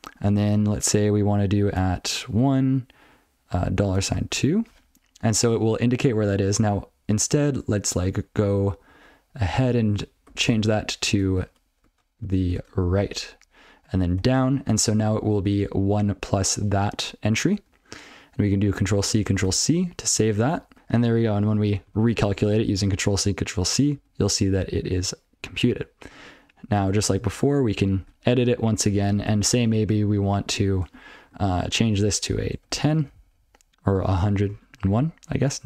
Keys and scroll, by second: 1.6 @, 2.2 1, 3.7 $, 4.3 2, 7.8 alt+Left, 10.3 Left, 11.8 ctrl+f, 12.2 ctrl+f, 12.4 ctrl+f, 12.9 shift+Left, 14.2 shift+Down, 19.4 ctrl+c, 20.4 ctrl+n, 20.7 ctrl+n, 20.7 ctrl+c, 21.1 ctrl+p, 21.2 ctrl+c, 21.4 ctrl+n, 21.6 ctrl+p, 22.0 ctrl+c, 23.7 ctrl+p, 23.9 ctrl+p, 28.2 ctrl+f, 28.5 ctrl+e, 31.5-31.9 ctrl+b, 32.0 ctrl+b, 32.5-34.5 typing.